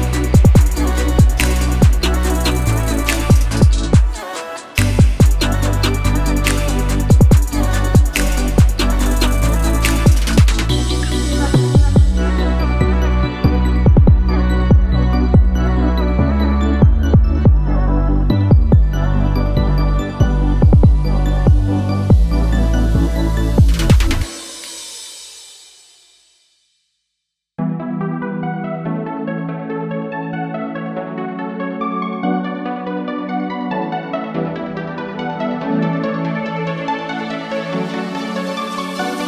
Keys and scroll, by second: 12.6 0, 13.1 shift+5, 13.4 shift+Return, 14.3 Return, 20.3 ., 20.6 2, 21.0 Return, 24.4-25.3 typing, 31.9 0, 32.1 Return, 36.1 0, 36.4 Return.